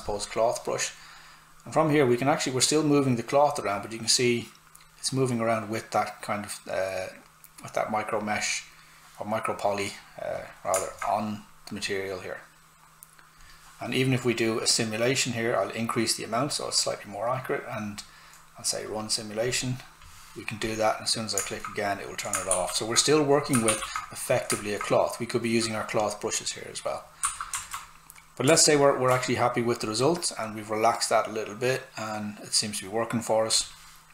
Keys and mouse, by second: 22.5 shift+f, 23.1 click, 23.6 shift+f, 24.2 click, 27.2 q, 27.6 alt+right click, 29.8 click.